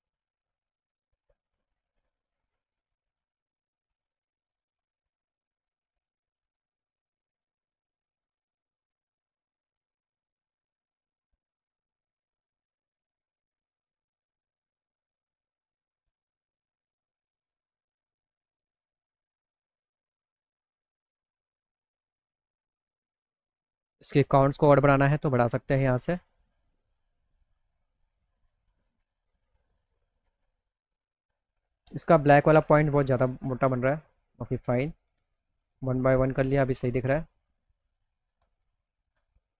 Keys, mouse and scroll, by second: 1.1 click, 3.0 click, 4.3 click, 7.7-10.3 drag, 11.5 click, 13.5 click, 14.6 click, 16.3 click, 17.6 click, 18.8 click, 19.8-21.9 drag, 24.5 click, 24.8 click, 25.5 click, 26.2 click, 26.9 click, 28.3 middle click, 28.4 middle click, 28.6 alt+middle click, 30.7 click, 33.6 middle click, 34.0-35.7 middle drag, 36.3-37.8 alt+middle drag, 38.3 middle click.